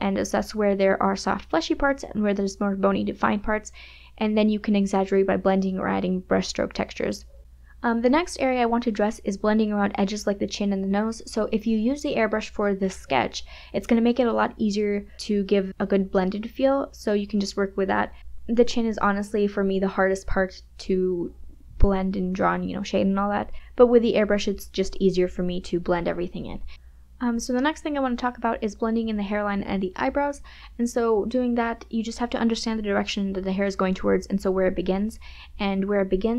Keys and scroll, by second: 1.2 KP_Subtract, 3.7 KP_Subtract, 3.9 space, 4.8 ], 11.5 KP_Subtract, 11.7 KP_Add, 13.7 [, 14.3 KP_Subtract, 14.5 KP_Add, 28.5 ], 30.4 space.